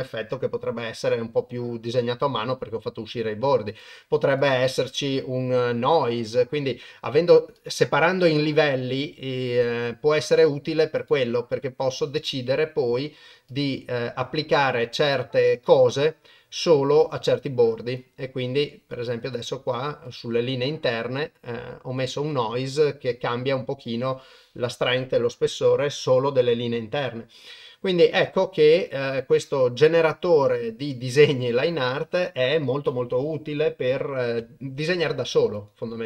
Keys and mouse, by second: 3.7 click, 4.4-7.7 drag, 9.5 click, 11.0 click, 12.3-13.7 drag, 15.8-17.0 drag, 18.0-19.3 drag, 20.2-22.0 drag, 29.4 click, 35.5 click.